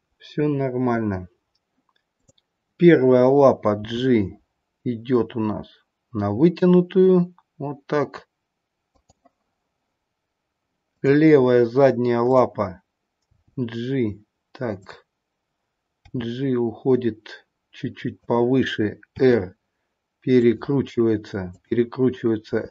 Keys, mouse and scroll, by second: 2.2 click, 3.8 g, 10.0-10.9 scroll down 1, 10.9 click, 12.1-13.1 scroll down 1, 13.1 click, 13.3 g, 14.7 click, 16.0 g, 19.1 r, 21.5 click, 22.6 r.